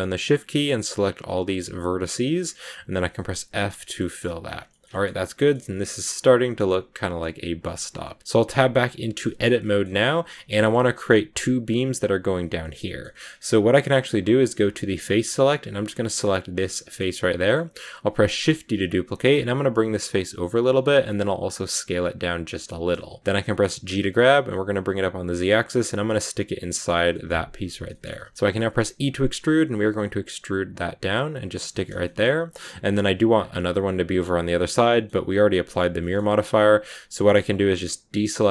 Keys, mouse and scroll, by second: 0.5 shift+right click, 1.1 shift+right click, 1.9 shift+right click, 2.3 scroll down 1, 3.2 f, 3.4 scroll down 3, 3.7 shift+middle click, 4.1 scroll up 1, 4.2 Tab, 4.3 scroll down 1, 4.6 shift+middle click, 5.5 a, 5.5 scroll up 1, 5.6-8.2 middle drag, 8.2 Tab, 9.1 shift+middle click, 9.7-10.1 scroll up 2, 10.1 scroll down 1, 10.2 shift+middle click, 10.6-12.5 scroll up 1, 12.5 shift+middle click, 13.2-13.8 scroll up 4, 14.8 click, 16.0 right click, 16.5-18.3 middle drag, 18.3 shift+d, 22.5 middle click, 22.9 scroll down 1, 23.2-23.8 scroll up 1, 23.8 g, 26.7 scroll down 3, 27.0 shift+middle click, 27.5 scroll down 1, 27.5 scroll up 1, 27.6 scroll down 1, 27.8 shift+middle click, 28.0 scroll up 1, 28.2 middle click, 28.6 e, 31.6 middle click, 31.8 scroll down 1, 31.9 shift+middle click, 32.2-32.8 scroll up 2, 32.4 middle click, 32.8-34.8 scroll down 2, 34.8-36.4 middle drag, 36.4 a, 36.6 a, 38.1 a.